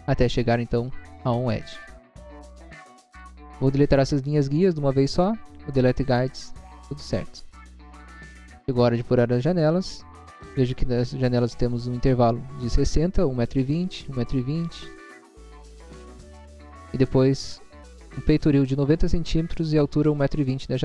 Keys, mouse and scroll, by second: 1.3 click, 2.1 scroll down 1, 2.7 scroll down 1, 6.0 click, 6.9 scroll down 1, 7.6 middle click, 7.9 middle click, 8.3 scroll up 1, 9.0 scroll up 1, 20.3 click.